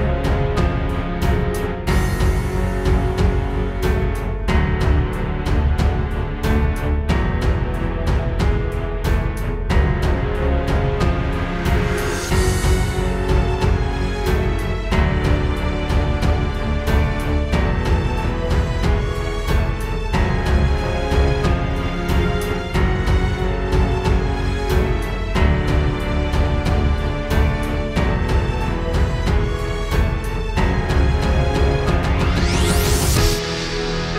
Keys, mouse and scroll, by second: 1.2 click, 3.0 click, 4.2 click, 5.3 click, 7.5 click, 10.5 space, 12.8 Escape, 14.2 click, 14.3 click, 16.0 right click, 18.7 click, 23.4 click, 27.4 space.